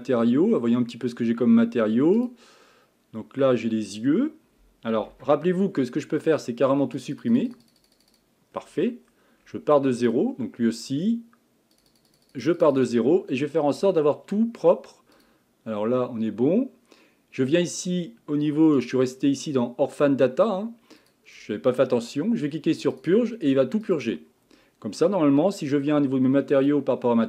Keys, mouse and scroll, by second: 0.5 scroll down 4, 2.2 click, 3.4 Tab, 5.1 Tab, 7.0-8.5 drag, 8.5-9.2 scroll down 10, 9.4 scroll up 6, 10.1 click, 11.7-13.4 drag, 13.4 scroll down 5, 13.7-15.1 scroll up 5, 15.1 click, 18.8-21.1 drag, 22.9-25.9 drag, 26.5 click.